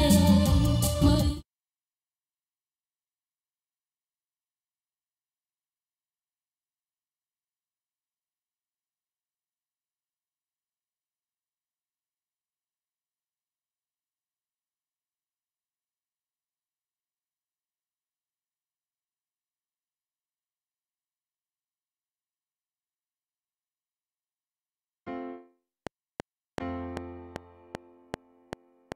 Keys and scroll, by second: 1.1 space, 25.7 F7.